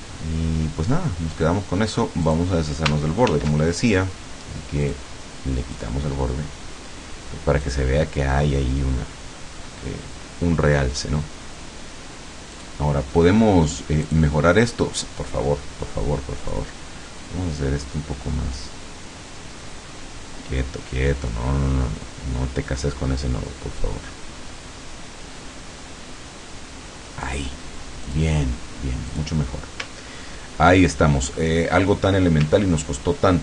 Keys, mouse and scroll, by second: 2.3 click, 3.4 ctrl+shift+f, 4.9 click, 5.8 click, 7.7 click, 12.6 click, 14.1 click, 16.4 click, 18.0-27.5 drag, 28.1 click, 29.2 click, 30.0-30.5 ctrl+scroll down 2, 30.8 ctrl+middle click, 32.6 ctrl+scroll up 2.